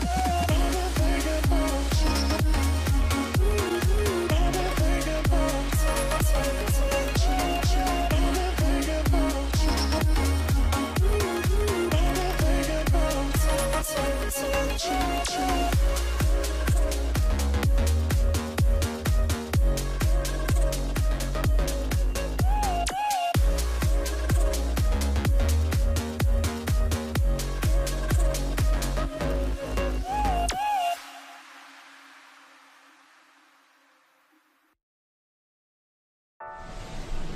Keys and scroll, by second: 8.1 typing, 8.6 Return, 12.1-12.8 typing, 22.9-25.7 typing.